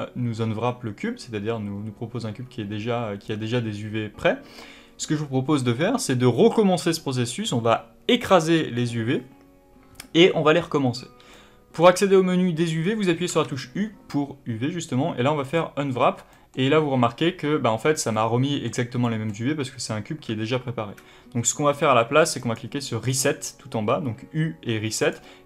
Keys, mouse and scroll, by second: 2.3-5.3 scroll up 1, 11.2-12.2 middle drag, 11.2 scroll up 2, 12.2-12.7 scroll down 1, 13.2 u, 16.2 middle click, 20.2 u.